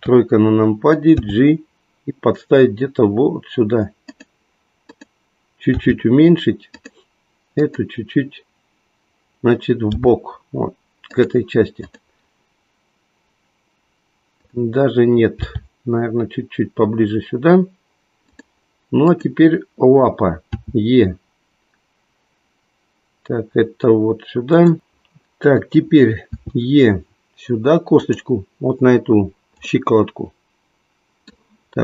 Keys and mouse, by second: 0.8 KP_3, 1.1 g, 4.1 click, 5.8 g, 7.6 click, 10.0 g, 15.4 g, 18.2 click, 19.1 click, 20.7 e, 24.5 click, 26.3 e, 28.0 click, 29.5-31.8 middle drag.